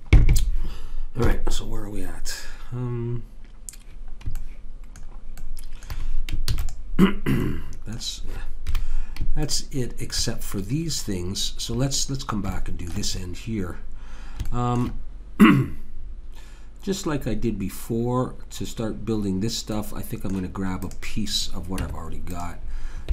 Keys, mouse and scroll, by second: 1.3 KP_3, 4.4 middle click, 6.5 ctrl+s, 8.7 KP_3, 12.6-14.7 middle drag, 20.9 click, 21.8 Tab.